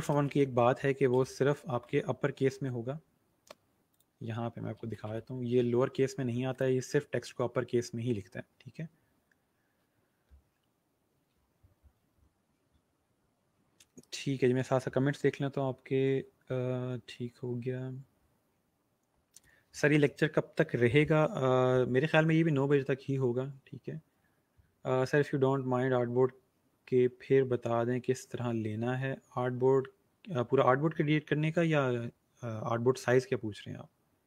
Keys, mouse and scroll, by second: 0.0-2.3 typing, 4.5-5.5 typing, 4.6 click, 6.4 click, 7.8 scroll down 1, 8.9 scroll up 1.